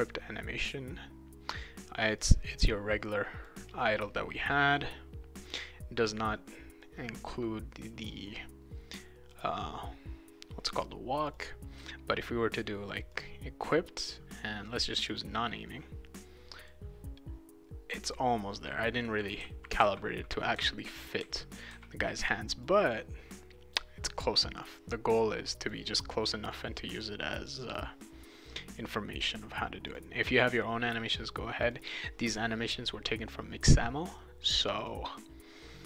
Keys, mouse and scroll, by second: 2.2-3.5 drag, 4.5 click, 6.8-8.0 drag, 9.3 click, 11.2 click, 11.3 click, 12.9 click, 13.1 click, 14.9 click, 15.1 click, 15.7 click, 18.5-22.1 right drag, 19.4-21.7 typing, 22.6-23.7 drag, 24.6-25.7 drag, 26.5-27.7 drag, 29.8 click, 31.6 click, 31.8 click, 34.6 click, 34.8 click.